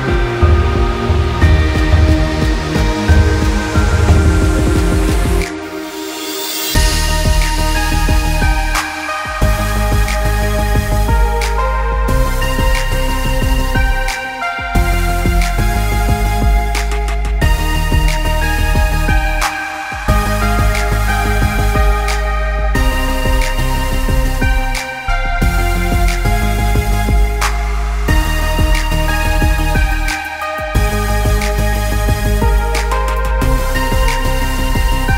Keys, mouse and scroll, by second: 0.9 click, 1.2 l, 2.7 r, 6.1 KP_0, 8.4 KP_0, 9.1 click, 10.0 Tab, 10.5 middle click, 10.9 scroll down 2, 11.1 middle click, 11.6 scroll up 3, 11.9 middle click, 13.1-14.0 scroll down 4, 13.3 middle click, 14.0 middle click, 14.3 middle click, 14.5-15.4 scroll up 4, 14.9 middle click, 15.5 click, 19.6 click, 20.0 click, 20.3 middle click, 20.4 scroll up 1, 21.0 click, 22.0 click, 22.7 click, 25.7 click, 26.8 middle click, 27.5 click, 28.1 click, 28.4 middle click, 28.9 click, 29.6 click, 31.9 click, 32.1 click, 32.6 click, 33.0 click, 34.3 click, 34.4 click.